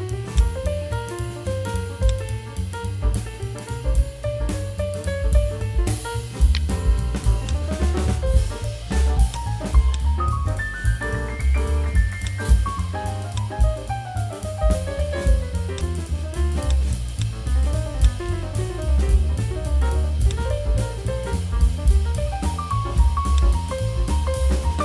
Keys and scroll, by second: 4.5 v, 13.9 v.